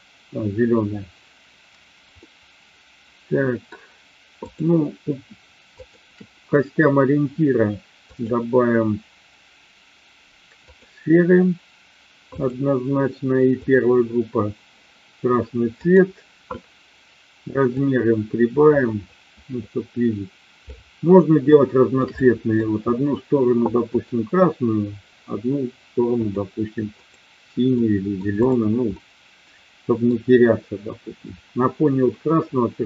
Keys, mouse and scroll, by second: 2.1-3.7 middle drag, 4.3-5.2 drag, 5.7-6.6 shift+drag, 8.2-10.8 drag, 12.3 click, 15.8 click, 17.7-20.8 drag, 21.4-22.1 shift+middle drag, 22.2-22.6 middle drag, 23.8 click, 26.2 click, 27.1 click, 27.7-28.1 middle drag, 28.4 click, 28.8-30.1 middle drag.